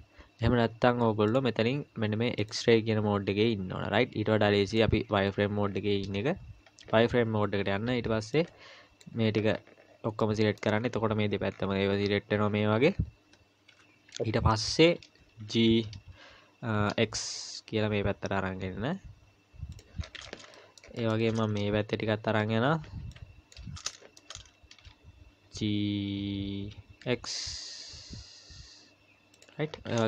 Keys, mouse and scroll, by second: 0.4 z, 2.4 click, 4.7 click, 5.1 z, 6.1-6.7 scroll up 2, 6.7-7.1 scroll down 1, 7.9 b, 10.2 middle click, 10.7-11.5 scroll down 4, 11.5-12.3 scroll down 5, 12.9-13.3 scroll down 4, 13.7 KP_1, 14.3-15.1 scroll up 4, 15.5 g, 20.0-20.4 scroll down 10, 20.5 shift+scroll up 1, 20.6 shift+middle click, 21.2-22.5 shift+scroll up 7, 22.5 scroll up 3, 22.5 a, 23.0 b, 23.9 shift+middle click, 24.3-25.4 scroll up 3, 25.4 g, 29.6-30.0 scroll down 14.